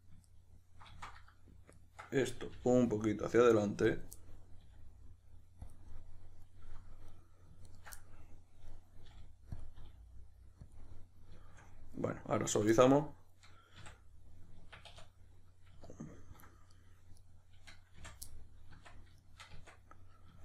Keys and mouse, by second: 0.3 right click, 1.7 ctrl+right click, 2.5 g, 3.9 click, 4.2-5.7 middle drag, 4.7 r, 5.7 click, 5.9-7.1 middle drag, 7.1 right drag, 7.7 ctrl+right drag, 8.0-9.6 middle drag, 9.0 g, 9.6 click, 9.8 r, 10.7 click, 10.8-16.7 middle drag, 13.8 q, 14.8 \, 16.7 right click, 17.2 right click, 18.0 f, 18.3-20.4 middle drag, 18.7 Tab, 19.5 Tab.